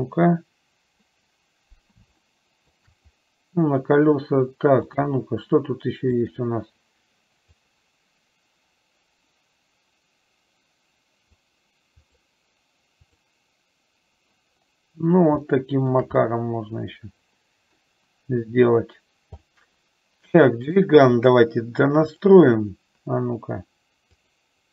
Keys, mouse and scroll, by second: 2.5 shift+middle click, 6.4-14.4 drag, 15.6 shift+middle click, 16.5-18.1 middle drag, 19.8-20.9 middle drag, 22.3 click, 24.3 click.